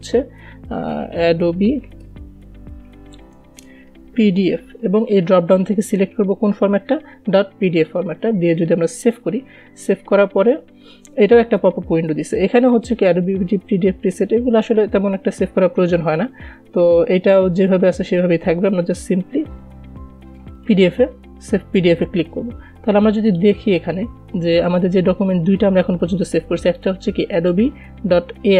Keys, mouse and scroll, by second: 1.0 ctrl+s, 1.1-5.3 typing, 6.0 click, 21.0 click, 23.7 click, 27.1-28.5 drag.